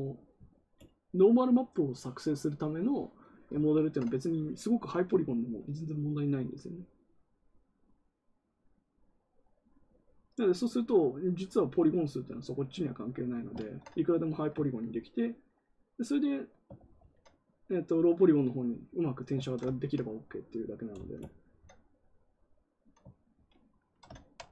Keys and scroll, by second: 16.7 ctrl+z, 16.9 ctrl+z, 23.2 ctrl+z.